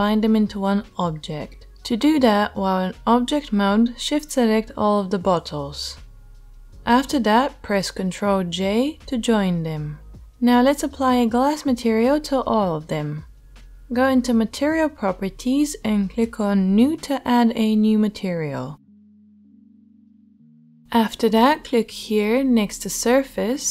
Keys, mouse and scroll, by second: 2.1-2.5 shift+middle drag, 2.5-3.2 ctrl+right drag, 2.7 ctrl+z, 3.5 shift+middle drag, 3.7 shift+middle drag, 4.6-5.7 shift+right drag, 5.8 shift+middle drag, 7.0 ctrl+j, 16.8-18.2 middle drag, 18.3-23.7 middle drag, 20.8 s.